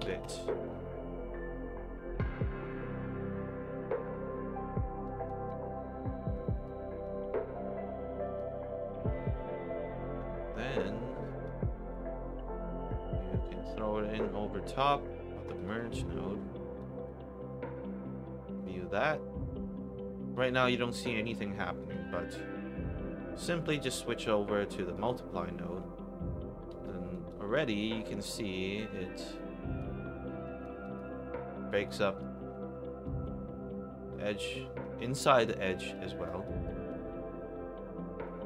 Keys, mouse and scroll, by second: 0.2 Return, 5.0 alt+right click, 5.4 alt+click, 6.6 alt+right click, 7.0-8.3 alt+drag, 11.4-11.8 drag, 12.8-13.4 drag, 15.4 click, 15.6 click, 15.9 1, 16.7 click, 20.3 click, 21.7 click, 24.9 click, 26.8 alt+right drag, 27.2 alt+drag, 28.5 alt+click, 29.9 alt+middle click, 30.4 alt+right click, 30.8 alt+click, 31.8 click, 32.4 alt+middle click, 33.0 alt+right click, 34.0 alt+click, 35.9 alt+right click, 36.4 alt+click, 36.8 alt+right click, 37.2 alt+middle click, 38.2 alt+click.